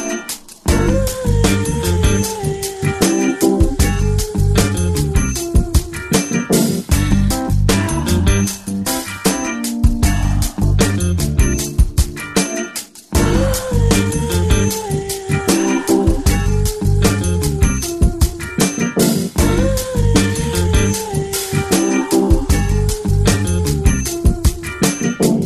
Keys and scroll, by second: 8.9 ctrl+i, 12.0 x, 15.8 ], 16.7 [, 17.3 [, 18.4 [, 18.6 [.